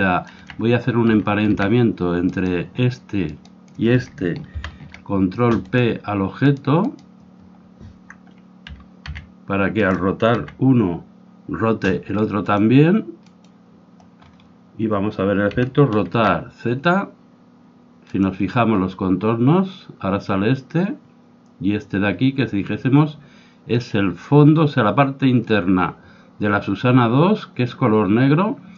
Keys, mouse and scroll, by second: 0.0-2.4 drag, 0.3 z, 1.0 z, 2.4-5.0 right drag, 2.4 z, 4.6 ctrl+p, 6.4-8.8 right drag, 8.8 r, 10.3 z, 12.5-15.3 drag, 15.3-16.6 middle drag, 15.6 r.